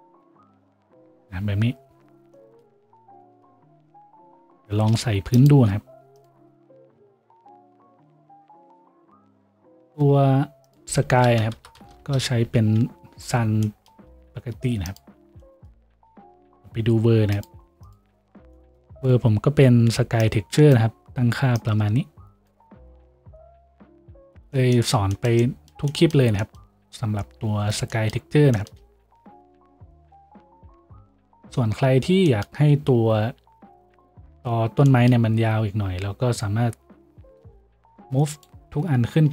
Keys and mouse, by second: 4.6-8.4 shift+drag, 4.7 shift+a, 7.5 right click, 7.5 s, 8.4-13.4 middle drag, 8.4 s, 9.5 n, 13.4-15.2 drag, 13.4-15.2 right drag, 13.4 n, 14.3 s, 15.2-25.0 middle drag, 15.2 a, 25.0-39.3 shift+drag.